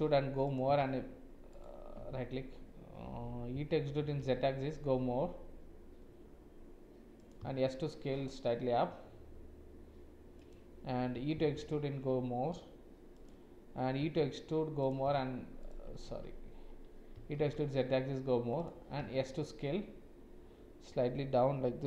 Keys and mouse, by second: 0.6 s, 2.0 ctrl+z, 3.5 e, 7.3 s, 11.1 e, 13.9 e, 15.0 s, 16.0 ctrl+z, 17.1 e, 19.0 s.